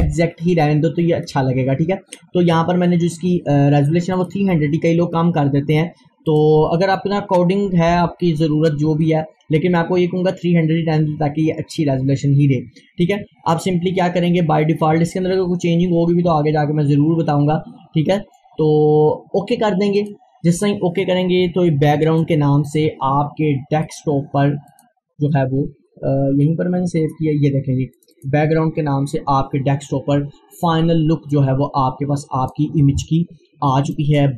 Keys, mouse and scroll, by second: 4.2-5.2 scroll down 1, 17.7-18.2 scroll up 1, 20.0 click, 23.9 right click, 24.7 click, 28.0 click, 31.3 click, 31.4-34.0 drag.